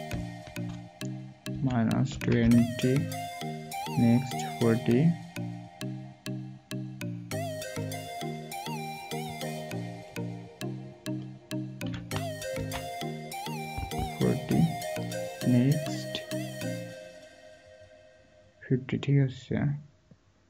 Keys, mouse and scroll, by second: 1.5-2.4 typing, 12.5 typing.